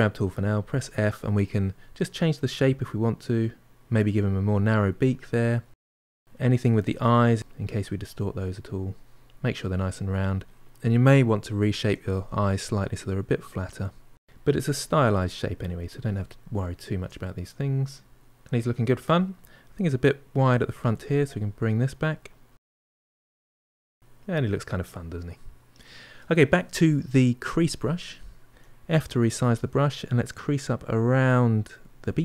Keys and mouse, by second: 0.0 f, 2.4-5.7 drag, 6.2-7.4 middle drag, 7.4-9.1 drag, 9.1-11.0 middle drag, 11.0 f, 11.6-13.5 drag, 13.5 middle click, 14.1-15.8 drag, 15.8-17.6 ctrl+middle drag, 18.1 ctrl+middle click, 18.9-23.0 drag, 23.0-24.9 middle drag, 27.3 click, 28.3 f, 29.6 middle click, 30.5-32.2 drag.